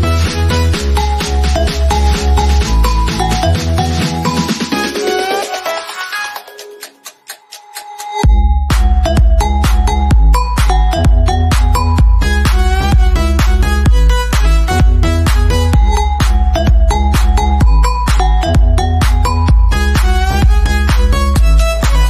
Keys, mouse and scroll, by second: 2.3-5.8 shift+middle drag, 5.8 click, 11.3 click, 12.7-14.3 shift+middle drag, 14.3 click, 20.3 click.